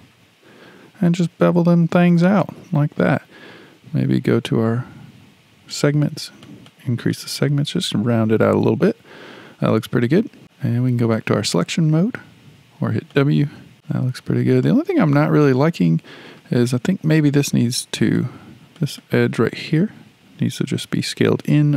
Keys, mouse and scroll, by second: 4.4-10.2 drag, 11.5-13.1 drag, 13.1-15.8 shift+middle drag, 15.8 click, 17.1 click, 17.3 click, 18.0 click, 18.2 click, 18.8 click, 19.0 click, 19.7-21.7 middle drag.